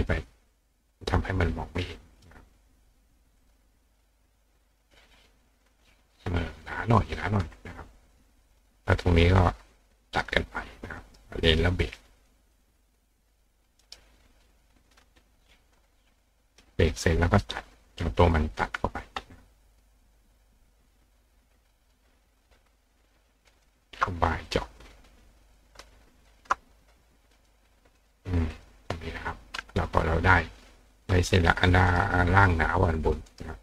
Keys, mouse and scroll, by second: 2.2 click, 3.4 click, 5.5 click, 8.5 click, 9.0 click, 10.2 click, 11.0 right click, 12.2 click, 12.6 click, 13.2 click, 13.8 right click, 14.5 click, 14.9 click, 15.8 click, 16.8 click, 17.5 click, 19.7 click, 20.1 click, 20.8 click, 21.5 click, 23.5 shift+click, 24.5 click, 25.5 click, 26.2 shift+click, 27.4 click, 28.0 click, 28.5 click, 31.6 click, 31.9 right click, 33.3 right click.